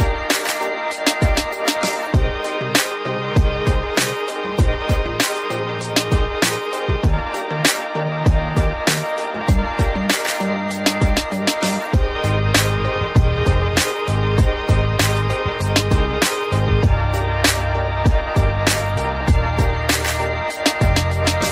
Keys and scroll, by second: 11.8 ctrl+d.